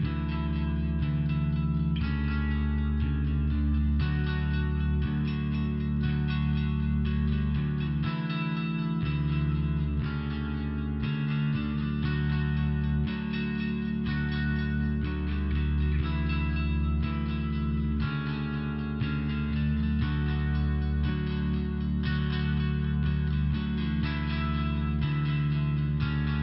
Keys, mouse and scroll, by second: 1.9 click, 2.3 click, 5.0 click, 10.3 click, 14.5 click, 17.9 click, 20.2 click, 22.5 click, 22.7 click.